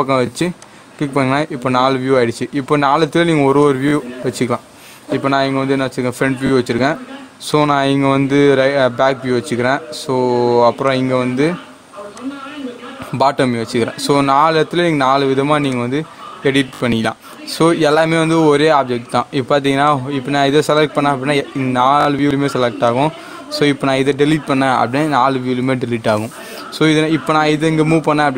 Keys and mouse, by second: 3.5 click, 7.4 click, 10.7 click, 10.8 click, 15.7-18.3 drag, 27.3 g.